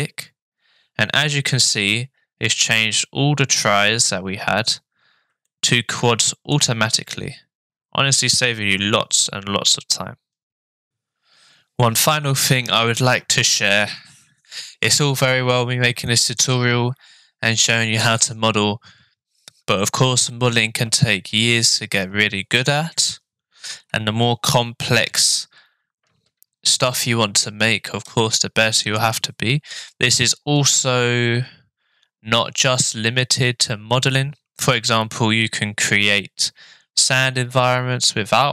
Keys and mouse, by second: 5.5-6.6 shift+middle drag.